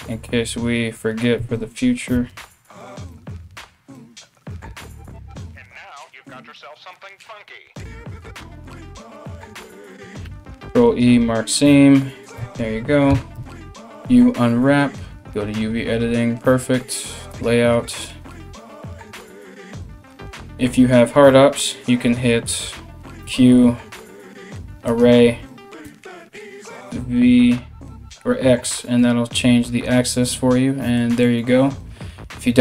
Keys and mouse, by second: 1.0 2, 1.9 alt+shift+right click, 2.7 alt+shift+right click, 3.6 alt+shift+right click, 5.0 alt+shift+right click, 5.7 alt+shift+right click, 6.1 alt+shift+right click, 6.5 alt+shift+right click, 6.7-7.8 alt+shift+middle drag, 7.8 alt+shift+right click, 8.0-9.2 ctrl+alt+shift+middle drag, 8.5 ctrl+z, 9.2 alt+shift+right click, 9.4-15.0 ctrl+alt+shift+middle drag, 9.9 ctrl+e, 12.0 a, 12.7 u, 16.9 click, 16.9-32.6 middle drag, 22.8 q.